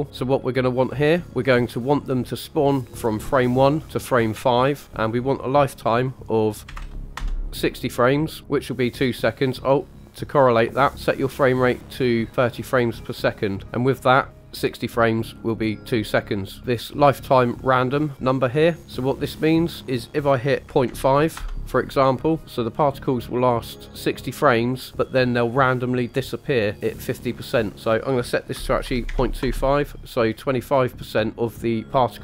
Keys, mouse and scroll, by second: 4.8-10.1 drag, 10.9-12.3 scroll up 3, 14.3 click, 18.1 click, 19.7 click, 27.7 click.